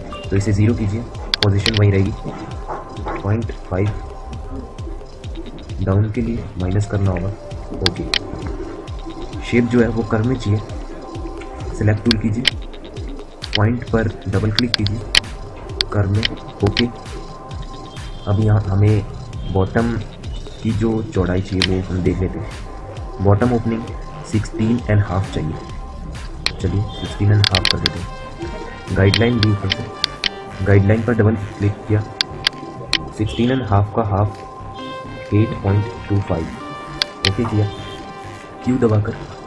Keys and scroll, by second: 3.6 5, 5.6 Left, 6.6 -, 11.1 End, 34.7-36.4 typing, 38.2 q.